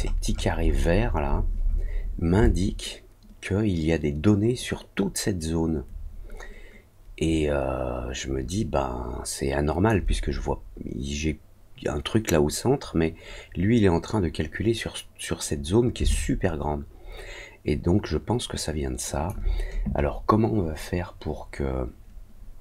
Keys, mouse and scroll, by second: 1.3 scroll up 2, 1.5-1.9 scroll down 4, 1.9 scroll up 2, 2.4-9.8 alt+drag, 16.0-19.2 alt+drag.